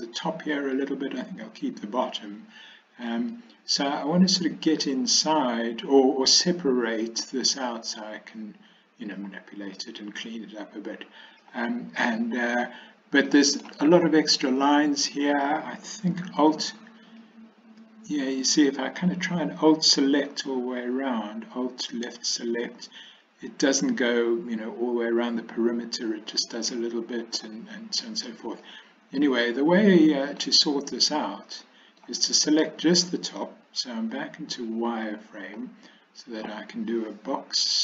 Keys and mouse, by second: 0.8-3.2 middle drag, 8.4 middle click, 9.8-11.5 middle drag, 13.4 middle click, 17.1 alt+click, 26.8 middle click, 28.7-30.5 middle drag, 31.5 middle click, 34.3 z, 35.6-36.5 middle drag.